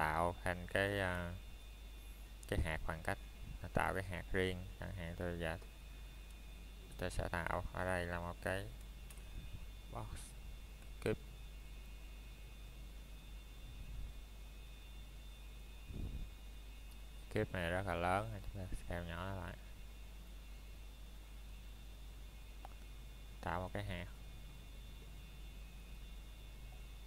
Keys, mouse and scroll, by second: 2.0 right click, 2.9 middle click, 3.8 shift+middle click, 4.2 scroll up 1, 9.7 click, 12.0-12.8 scroll down 1, 13.9 middle click, 16.6 click, 20.4 middle click, 20.7-21.5 scroll up 1, 23.0 shift+middle click, 23.4-25.3 scroll up 1, 25.3 click.